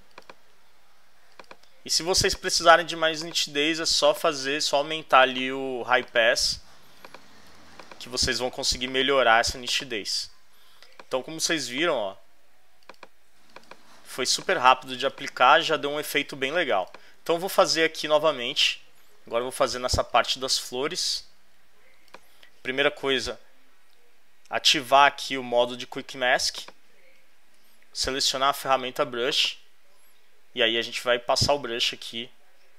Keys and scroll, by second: 10.6 space, 16.0 space, 17.4 super+-, 19.7 super+space.